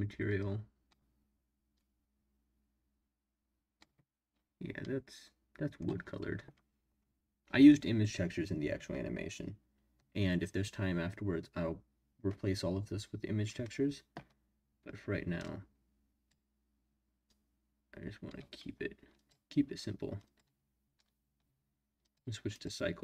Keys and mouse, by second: 4.8-5.8 middle drag, 15.4 click, 17.2-18.3 drag, 20.2 click, 22.0 click, 22.6-23.0 drag.